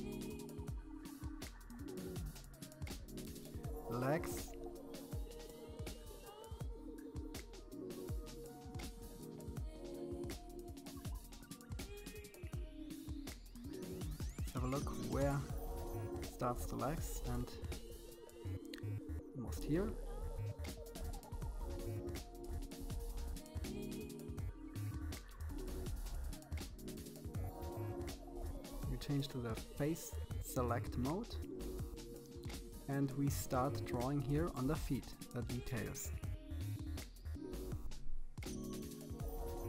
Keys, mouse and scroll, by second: 1.2 BackSpace, 11.9-12.5 scroll up 4, 12.5 shift+middle click, 13.3-14.1 scroll up 3, 14.1 KP_1, 15.2 scroll down 3, 15.4-16.7 middle drag, 16.7 KP_1, 17.4 scroll up 3, 17.9-19.4 shift+middle drag, 28.9-30.5 drag, 30.5 KP_3, 31.2-31.7 scroll up 4, 31.7-33.2 shift+middle drag, 33.4-33.9 scroll up 1, 33.9 KP_1, 34.6 middle click, 35.5 scroll up 2, 35.8 middle click, 36.6-37.6 scroll up 2, 37.6 scroll up 1, 38.6 c.